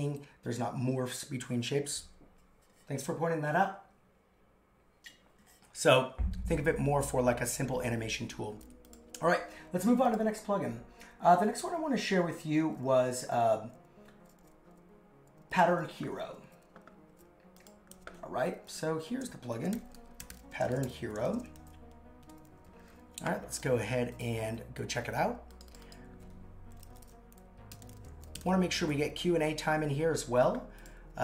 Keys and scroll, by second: 17.9 super+c, 19.5 shift+p, 20.7 shift+h, 21.3 shift+;, 21.4 shift+space, 21.6 super+v.